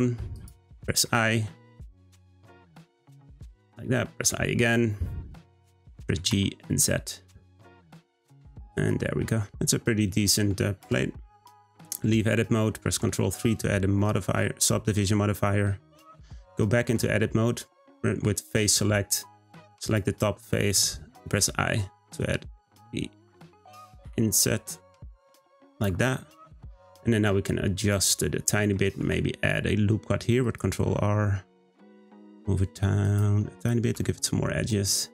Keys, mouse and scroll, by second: 1.0-4.0 middle drag, 4.2-6.0 middle drag, 6.0 g, 9.0-10.8 middle drag, 10.8 Tab, 11.1-12.9 scroll down 1, 12.9 ctrl+3, 13.4-14.0 scroll up 1, 14.0-16.2 middle drag, 16.2 Tab, 16.7-19.7 shift+middle drag, 19.9 click, 21.4 i, 24.1 i, 26.2 middle click, 27.1-27.5 scroll up 1, 27.5-28.7 middle drag, 29.0 r, 33.6 click, 33.9 Tab, 34.3-35.1 middle drag.